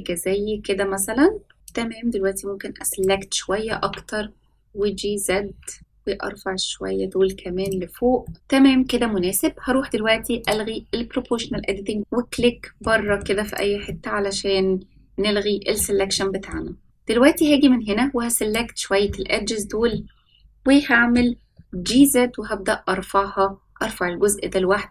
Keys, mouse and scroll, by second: 1.5 middle click, 1.6-3.0 drag, 3.6 g, 8.2 middle click, 10.4 click, 12.0 click, 12.3 middle click, 13.0 shift+middle click, 13.4 click, 13.8-15.7 middle drag, 16.1 shift+middle click, 17.3-19.8 drag, 19.8-21.1 middle drag, 21.4 g.